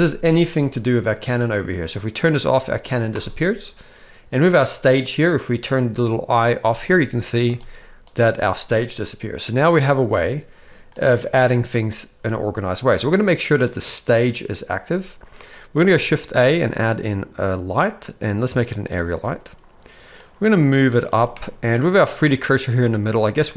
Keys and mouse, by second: 2.2 click, 3.1 click, 4.4 click, 6.6 click, 7.4 click, 8.0 click, 16.0 shift+a, 20.2-20.9 drag, 21.3-21.7 middle drag.